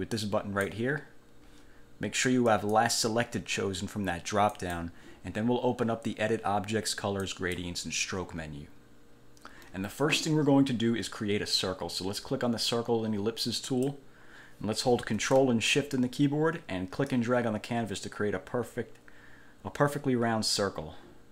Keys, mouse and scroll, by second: 0.3 click, 2.7 click, 4.7 click, 7.4 click, 13.8 click, 17.3-21.3 ctrl+shift+drag.